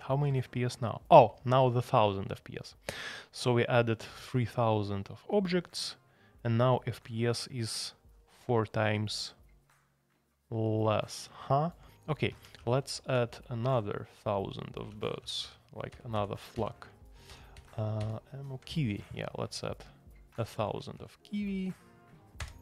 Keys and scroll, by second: 12.3 Escape, 12.5 shift+a, 13.0 alt+p, 13.3 alt+p, 13.6 alt+p, 14.9 alt+p, 15.9 alt+p, 17.3 alt+p, 17.5 alt+p, 18.0 alt+p, 22.4 Return.